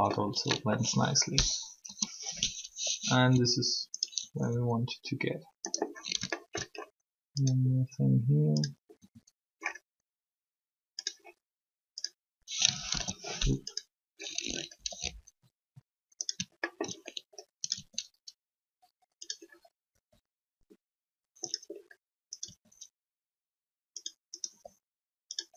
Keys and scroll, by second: 1.8 3, 9.0 r, 12.9 ctrl+z, 14.7 r, 17.6 shift+r, 19.9 r, 22.3 r, 24.5 r.